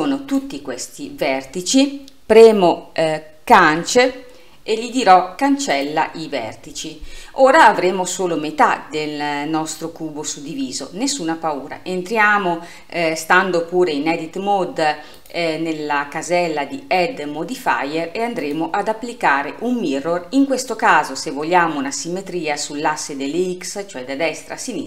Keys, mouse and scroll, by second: 3.7 Delete, 15.2-18.3 drag.